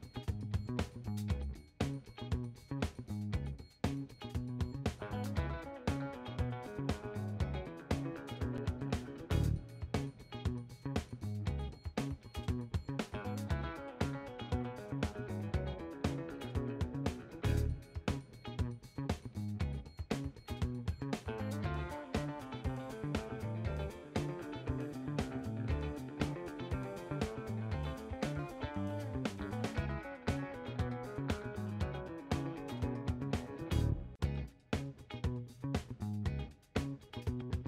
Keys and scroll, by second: 29.3 shift+Left, 29.7 1, 29.9 Left, 31.1 8, 31.4 Return, 33.0 8.